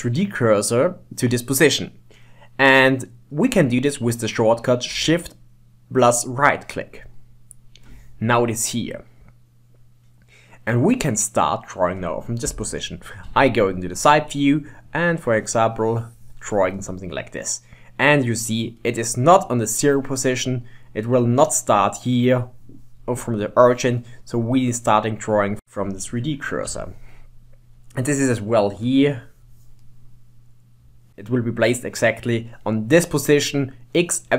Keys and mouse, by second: 7.1 shift+right click, 8.6 middle click, 13.3 KP_3, 14.9-16.8 drag, 16.8-19.7 middle drag, 20.5 middle click, 22.1-23.9 middle drag, 24.7-26.4 middle drag, 26.7 KP_7, 28.8-29.9 drag, 29.9-31.9 middle drag.